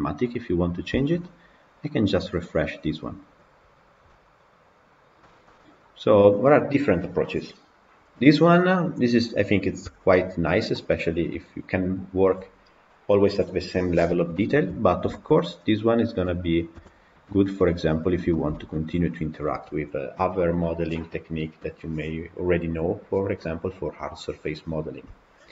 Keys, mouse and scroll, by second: 4.9 scroll down 3, 5.1-9.0 shift+middle drag, 9.0 click, 9.7 KP_Decimal, 10.6-14.5 middle drag, 14.5-15.0 scroll down 3, 15.0-16.1 shift+middle drag, 16.1 click, 16.6 KP_Decimal, 17.4-17.9 middle drag, 17.9 scroll up 2, 18.2-25.5 shift+middle drag.